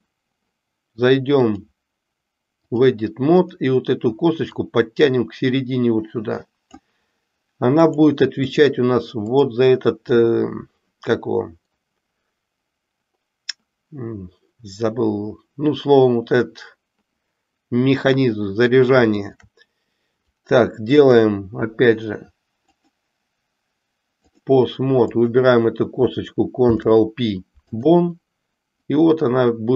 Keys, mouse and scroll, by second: 1.5-2.9 drag, 3.4 click, 4.6-6.8 drag, 7.8-8.8 drag, 9.2 click, 19.1 shift+click, 22.8-24.5 drag, 25.0 click, 26.5 ctrl+p, 29.0-29.7 drag.